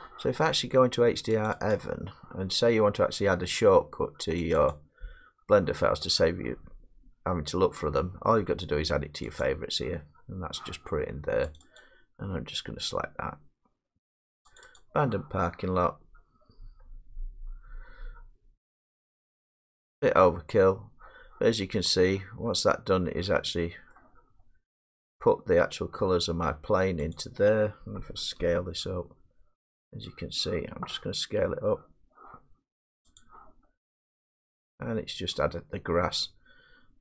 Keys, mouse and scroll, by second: 1.5 click, 1.7 click, 4.5 click, 4.7 click, 9.4 click, 11.6 click, 11.8 click, 14.6 click, 15.5-18.2 drag, 19.0 click, 19.2 click, 21.6-22.4 middle drag, 22.4 middle drag, 22.8 scroll down 2, 23.9 middle click, 24.3 scroll down 4, 26.7 middle click, 27.2 click, 27.5-28.4 scroll, 28.4 s, 28.8 middle click, 33.2 click, 33.6 middle click, 33.7 middle click, 35.3 middle click, 35.4 scroll, 35.7 middle click, 35.7-36.1 scroll down 6.